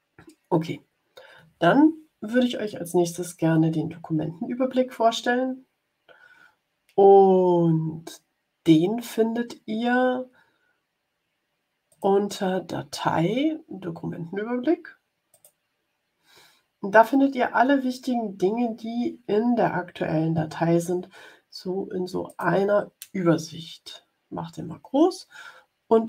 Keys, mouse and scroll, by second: 11.8 click, 15.2 click, 22.2 click.